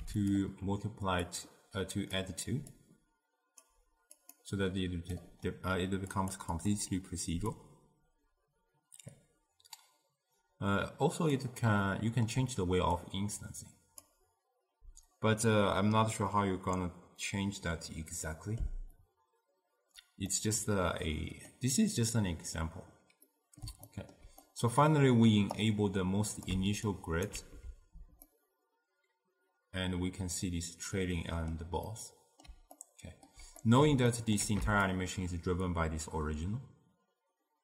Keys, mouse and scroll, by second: 1.4 drag, 2.8 drag, 4.3 click, 4.7-6.7 drag, 7.6-10.7 drag, 11.9-13.1 middle drag, 13.1 click, 16.4-19.4 middle drag, 20.4-23.8 middle drag, 24.0-25.7 ctrl+middle drag, 25.7 click, 26.9 ctrl+alt+right click, 28.4-31.4 middle drag, 32.0-35.0 middle drag, 35.0-37.6 shift+drag.